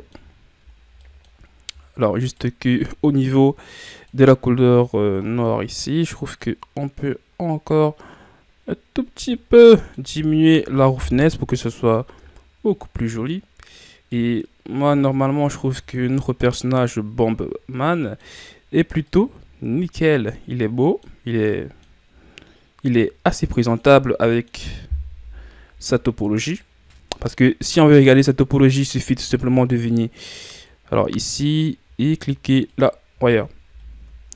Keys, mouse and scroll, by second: 0.6-1.0 scroll down 1, 1.0 middle click, 1.3 scroll up 5, 2.3-6.6 right drag, 6.6-9.5 drag, 9.5 scroll down 1, 9.6 middle click, 10.0 a, 11.2 KP_1, 14.1-20.3 middle drag, 20.3-20.6 scroll down 1, 20.6 middle click, 21.2 scroll down 2, 21.5-22.0 middle drag, 22.0-23.7 scroll up 6, 23.7 drag, 24.0 scroll down 3, 24.2-25.2 middle drag, 25.2 KP_1, 26.4-32.6 right drag, 32.6-33.6 drag, 33.6 a, 34.1-34.3 shift+scroll down 3.